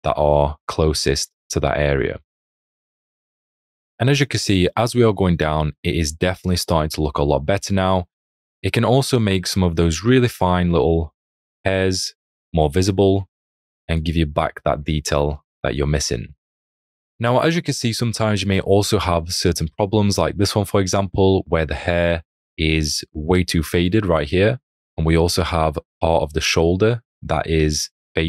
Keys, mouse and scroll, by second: 1.1 alt+click, 2.3 alt+click, 3.6 alt+click, 4.7 alt+click, 6.3 alt+click, 8.9 alt+click, 13.1 alt+click, 14.7 ctrl+z, 15.3 click, 17.7 click, 19.4 alt+scroll, 20.2 space, 23.7-24.6 scroll.